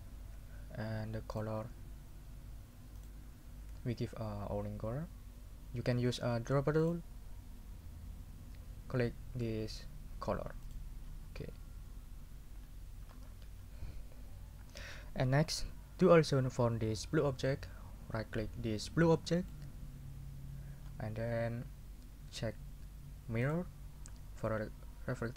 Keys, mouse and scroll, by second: 1.3 middle click, 3.0 middle click, 6.8 middle click, 10.6 middle click, 11.0-11.6 scroll up 3, 19.4 right click, 20.8-21.5 scroll down 4, 23.4 middle click.